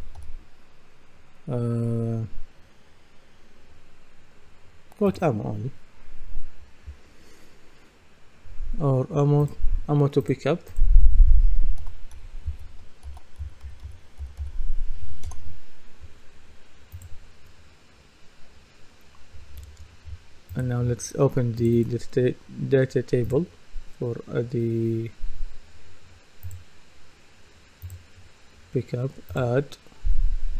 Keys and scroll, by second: 0.0-0.7 typing, 12.8-14.9 typing.